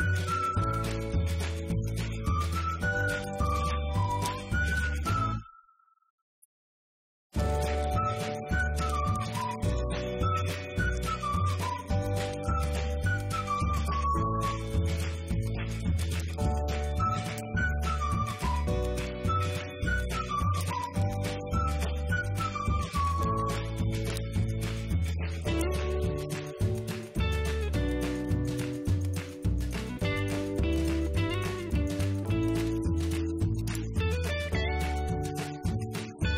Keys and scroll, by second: 0.8 ctrl+shift+;, 2.2 Return, 2.6 Up, 3.7 Delete, 4.0 Right, 4.6 Left, 5.9 ctrl+;, 6.8 Return, 7.8 Up, 8.1 Right, 8.3 Down, 9.2 ctrl+Down, 11.0 ctrl+Up.